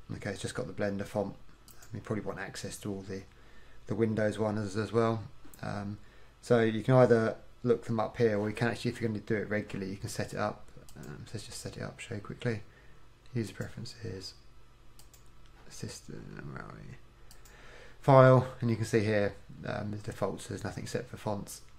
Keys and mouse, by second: 10.9-13.7 drag.